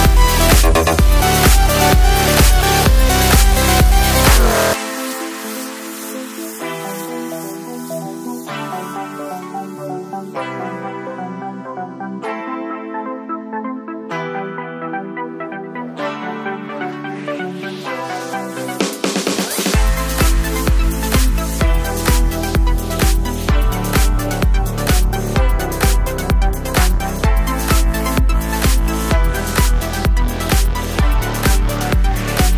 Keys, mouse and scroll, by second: 9.7-21.7 drag, 21.7-23.9 drag, 23.9-25.3 drag, 27.8 click, 28.9 click, 29.0-30.9 shift+drag, 31.3 click.